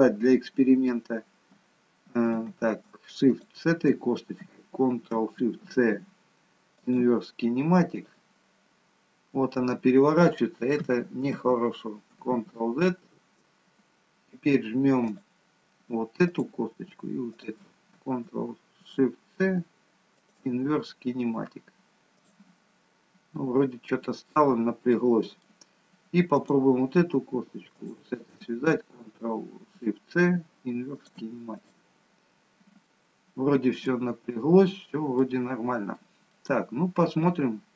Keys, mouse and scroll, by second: 3.3 shift+click, 5.7 ctrl+shift+c, 11.4 ctrl+z, 12.4 ctrl+z, 15.0 click, 16.3 click, 17.3 shift+click, 18.9 ctrl+shift+c, 20.4 ctrl+shift+c, 23.0-23.4 scroll down 1, 23.4 middle click, 24.6-25.2 scroll up 2, 25.0 middle click, 26.3 click, 28.0 shift+click, 31.8 ctrl+shift+c, 32.3 scroll up 2, 32.8 middle click, 34.7-35.4 scroll down 2, 35.2 middle click, 36.4 middle click, 37.0-37.7 scroll down 4.